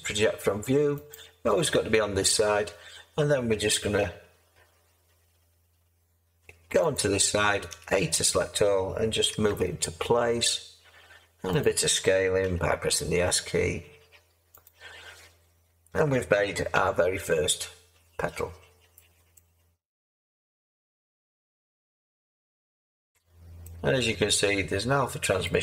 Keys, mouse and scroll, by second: 7.7 a, 9.3 g, 12.4 s, 16.7 Tab.